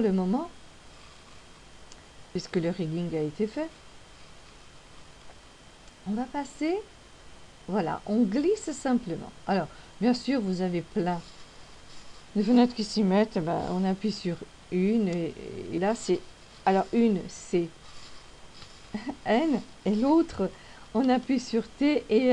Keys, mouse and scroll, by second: 6.0 click, 14.4 n, 15.5 n, 19.0 n, 21.5 t.